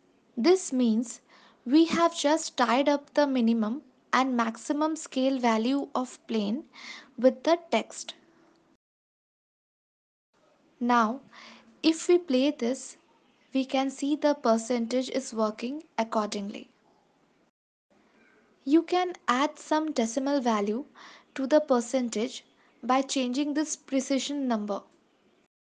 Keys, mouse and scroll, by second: 4.9 click, 5.8 click, 7.6 click, 12.5 click, 13.1 space, 17.4 space, 23.1 click, 23.9 click, 25.5 click.